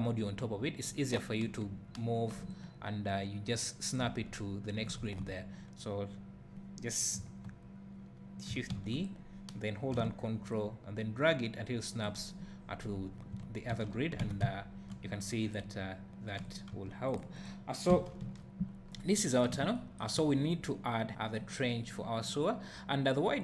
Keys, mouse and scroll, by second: 5.0 ctrl+z, 8.7 shift+d, 10.5-15.5 ctrl+drag, 13.7 z, 14.2 alt+a, 16.4 click, 16.7 x, 17.3 click, 17.9 KP_2, 18.2 KP_1, 18.8 scroll up 1, 19.1 `.